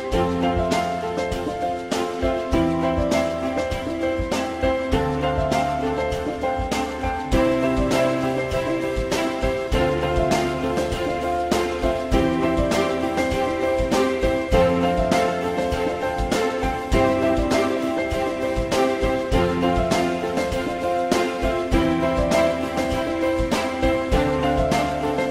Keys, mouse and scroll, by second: 0.9 ctrl+shift+e, 2.3 alt+middle click, 5.5 click, 6.5 click, 9.2 alt+middle click, 15.2 click.